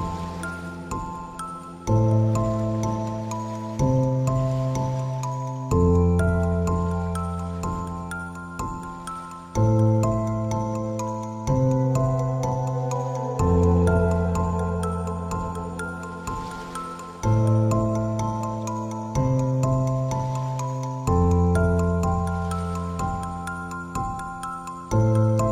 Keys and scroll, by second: 0.5 Delete, 1.9 ctrl+d, 7.7 ctrl+t, 21.0 Return.